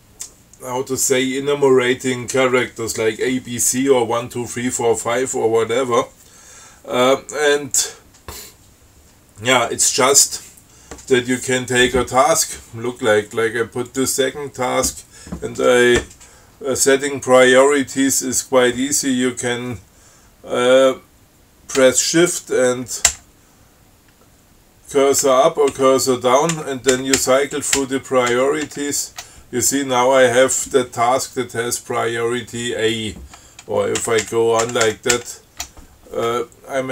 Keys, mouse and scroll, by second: 14.2 click, 23.4 shift+Up, 25.5 shift+Down, 26.8 shift+Up, 34.3 shift+Up.